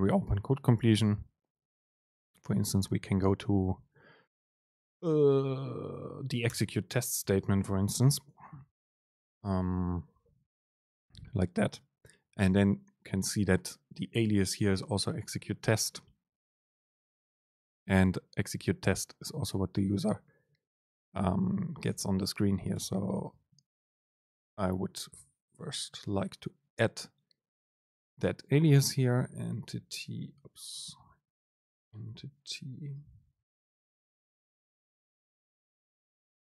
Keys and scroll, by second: 7.4 Left, 9.2 ctrl+alt+shift+s, 20.0 Right, 22.0 shift+Left, 23.4 BackSpace, 23.7 Return, 23.8 super+space, 25.2 BackSpace, 30.3 BackSpace.